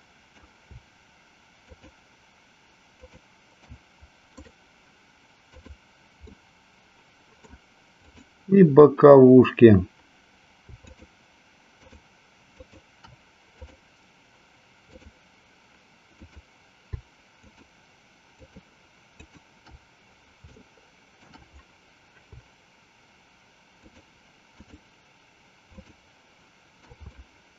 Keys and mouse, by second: 2.9 shift+click, 4.5-5.8 right drag, 6.4-7.6 middle drag, 8.1 click, 10.9 shift+click, 11.9 shift+click, 12.8 shift+click, 13.8 click, 14.9 click, 16.1 click, 17.4 shift+click, 18.5 shift+click, 19.4 shift+click, 20.6 shift+middle click, 23.8 shift+click, 24.6 shift+click, 25.9 shift+click, 27.1 shift+middle click.